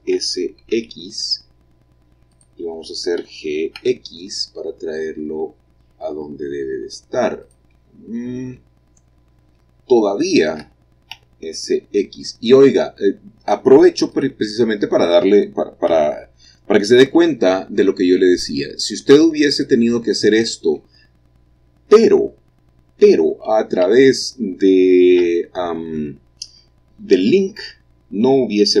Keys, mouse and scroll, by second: 0.0 s, 0.7 x, 2.3-3.8 drag, 3.2 g, 3.8 x, 7.4 click, 8.0 middle click, 9.0-9.8 scroll up 1, 9.7-11.1 shift+middle drag, 11.1 s, 11.8 x, 14.2 click, 14.5-15.9 middle drag, 15.9 g, 17.2 x, 19.5 click, 20.0-22.0 middle drag, 22.0-22.5 scroll down 1, 23.8 Tab, 25.2 l, 27.6 l.